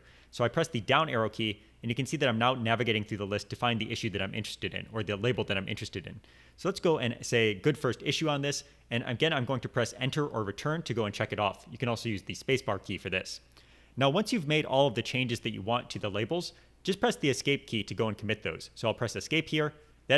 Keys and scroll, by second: 0.1-0.6 scroll up 1, 0.8-1.2 scroll down 1, 1.3 Down, 3.1 Down, 3.4 scroll down 1, 3.5-4.1 scroll up 3, 5.9-6.5 scroll down 1, 6.7-7.4 scroll down 3, 12.5 Return, 19.2 Home.